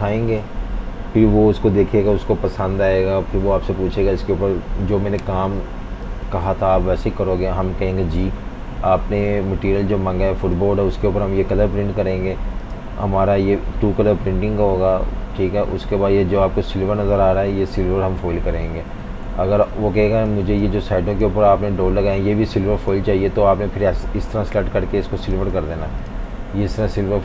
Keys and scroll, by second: 11.3 super+z, 19.3 typing, 20.6 v, 24.3 i, 25.6 typing.